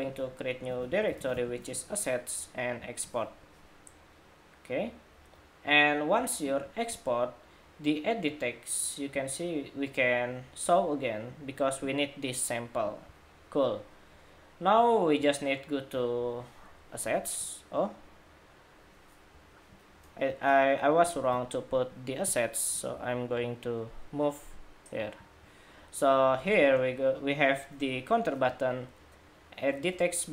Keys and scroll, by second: 19.2 Escape, 21.0 super+w.